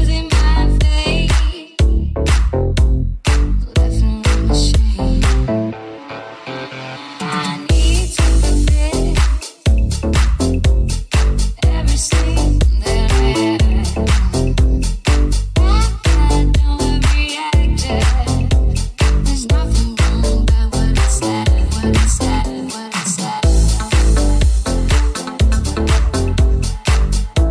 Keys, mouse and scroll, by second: 3.0-9.2 drag, 5.8 ctrl+b, 9.2 ctrl+b, 9.2-16.0 middle drag, 10.6 alt+z, 16.0 alt+right click, 16.2-27.5 alt+middle drag, 19.4 KP_1.